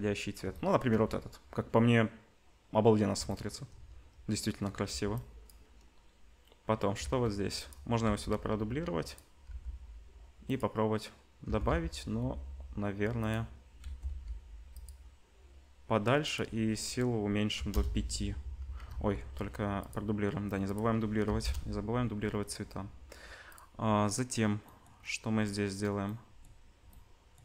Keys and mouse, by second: 4.9 ctrl+b, 7.0 shift+d, 8.0 r, 9.4 g, 11.1-16.2 middle drag, 11.4 g, 13.8 g, 16.2-23.6 drag, 18.9 ctrl+z, 23.6-27.4 middle drag.